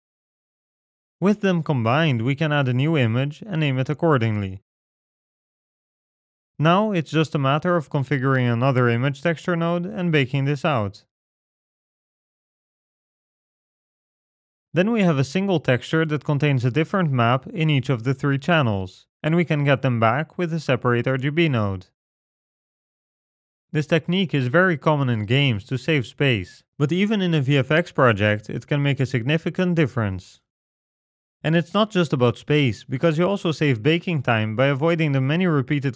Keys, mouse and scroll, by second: 1.4 click, 3.0 s, 3.9 s, 6.7-7.4 scroll down 12, 7.0 middle click, 7.4-8.2 scroll up 14, 7.9 click, 8.2 shift+d, 8.9 click, 10.9 middle click, 11.9-12.6 scroll down 6, 12.6 click, 17.6 shift+a, 21.5 click, 22.8 ctrl+shift+click, 24.4 ctrl+shift+click, 29.2 ctrl+right click, 29.7-30.5 scroll down 9, 30.0 middle click, 30.8 click, 31.3 middle click, 31.4-31.8 scroll up 2, 32.1 ctrl+right click, 32.9 click, 33.3 g, 33.7 click, 33.8 middle click, 34.1 click, 34.4 middle click, 34.6 g, 35.1 click, 35.3-35.8 scroll up 8.